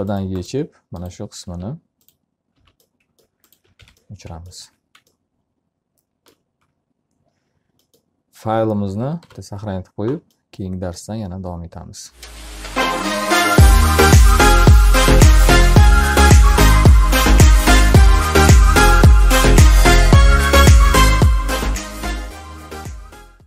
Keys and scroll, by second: 0.6 b, 2.2 alt+r, 4.5 F3, 5.4 q, 9.6 ctrl+s.